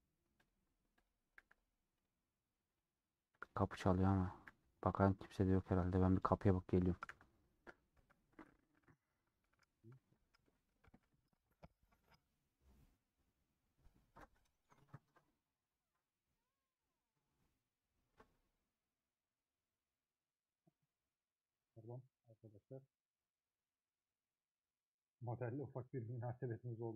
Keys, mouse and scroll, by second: 0.5 click, 1.4 h, 2.9 click, 3.7 h, 5.7 click.